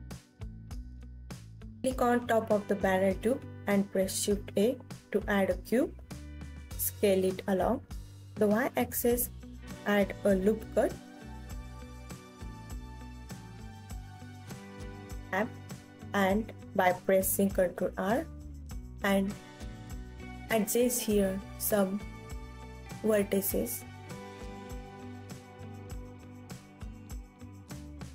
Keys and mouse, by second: 1.1 shift+a, 3.4 KP_3, 4.5 s, 4.9 y, 10.5 click, 11.0 KP_1, 12.3 s, 14.0 click, 14.3 g, 16.4 click, 17.1 Tab, 19.6 a, 20.4 alt+z, 21.5 ctrl+r, 23.3 click, 24.5 click, 25.4 g.